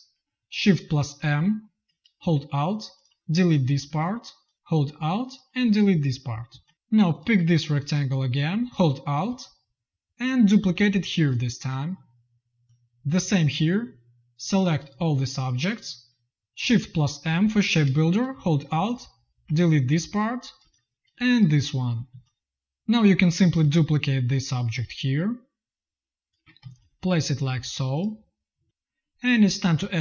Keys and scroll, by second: 1.1 shift+m, 3.5 space, 6.4 z, 16.2 z, 17.1 shift+m, 19.7-22.0 typing, 26.5 z, 27.4 v, 28.5 space.